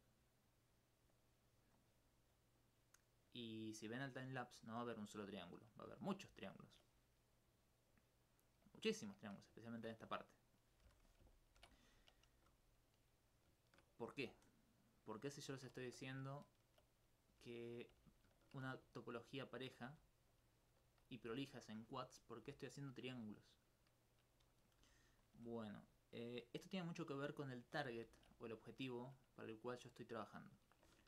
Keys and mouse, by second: 0.2 right click, 1.1 click, 1.3 right click, 1.8 click, 2.1 right click, 2.6 click, 3.0 right click, 3.3 click, 3.8 right click, 4.4 click, 4.9 right click, 5.6 click, 6.4 alt+click, 7.3 right click, 7.9 click, 8.2 right click, 9.3 right click, 9.7 shift+right click, 10.6 click, 10.8 s, 11.1 click, 11.6 alt+m, 11.8 click, 12.4 g, 12.8 click, 13.3 right click, 13.6 shift+right click, 14.0 right click, 14.2 e, 15.4 shift+right click, 16.2 alt+click, 17.0 right click, 17.3 g, 17.8 click, 18.1 alt+click, 18.2 alt+s, 18.9 shift+right click, 19.6 shift+right click, 19.9 shift+e, 20.3 click, 20.7 r, 21.2 click, 21.2 click, 21.8 click, 21.9 click, 22.3 click, 22.4 click, 22.9 click, 23.1 click, 24.0 click, 25.4-26.8 drag, 26.8 click, 27.2 click, 27.5 alt+click, 27.8 alt+click, 28.1 ctrl+z, 28.4 alt+click, 28.6 alt+click, 29.3 right click, 29.6 alt+click.